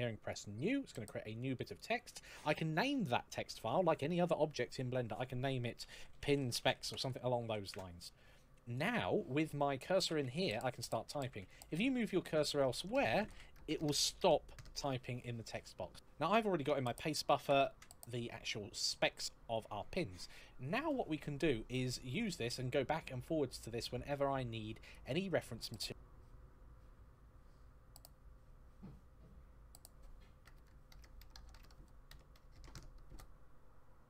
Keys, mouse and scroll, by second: 0.0 click, 5.7-7.2 typing, 7.4 Return, 8.5 click, 9.7-11.1 typing, 12.2 f, 12.8 d, 12.9 f, 15.5 click, 17.2 ctrl+v, 23.0-23.4 scroll down 1, 23.4-24.6 scroll up 1, 24.7 click.